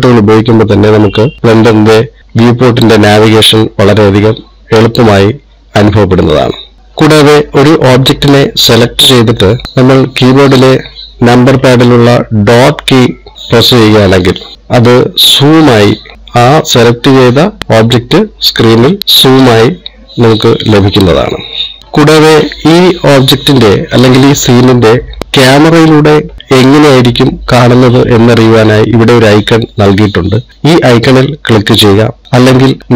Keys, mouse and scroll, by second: 1.4 scroll down 1, 1.7 middle click, 9.2 click, 13.3 KP_Decimal, 16.1 scroll down 5, 16.3-17.3 scroll down 1, 17.3 scroll down 4, 17.4-17.8 scroll up 2, 18.7-19.0 scroll up 2, 19.0-19.4 scroll down 1, 20.3 middle click, 21.8-22.1 scroll up 3, 25.2 middle click.